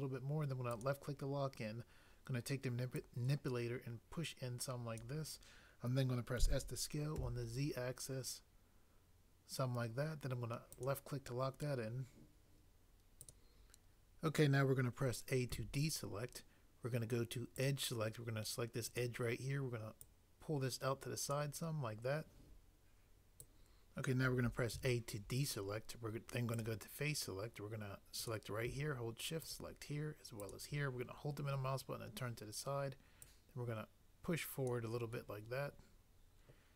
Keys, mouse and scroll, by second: 3.0 click, 6.4 s, 7.2 z, 13.2 click, 15.5 a, 20.0 click, 23.4 click, 23.5 click, 24.7 a.